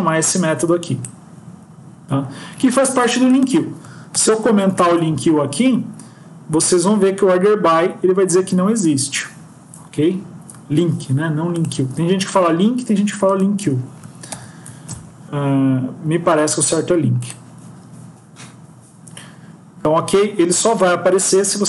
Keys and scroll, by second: 4.2 ctrl+,, 4.6 ctrl+s, 14.4 ctrl+,, 14.6 ctrl+s.